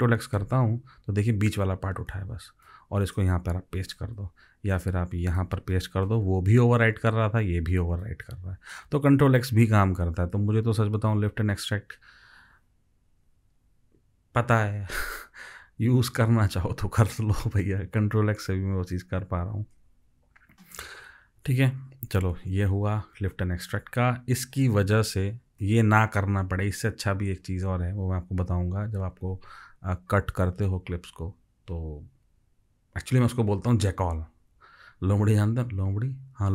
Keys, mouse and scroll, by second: 0.4 ctrl+x, 3.8 ctrl+v, 6.1 ctrl+v, 9.8 ctrl+v.